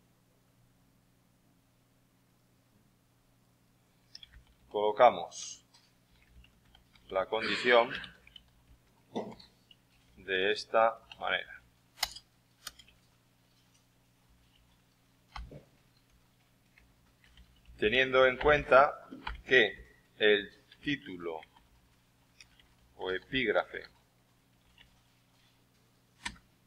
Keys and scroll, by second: 3.9-13.3 typing, 15.3-24.9 typing.